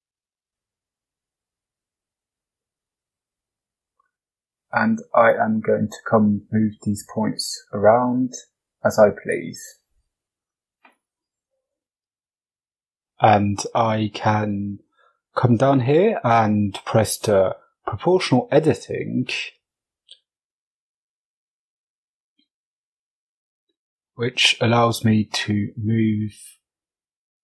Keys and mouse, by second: 0.5 Tab, 3.1 g, 5.2 right click, 5.6 shift+right click, 6.2 g, 7.6 right click, 8.0 shift+right click, 10.7 right click, 18.0 click, 19.2 shift+middle click, 20.4 right click, 21.1 c, 22.0 right click, 23.8 g.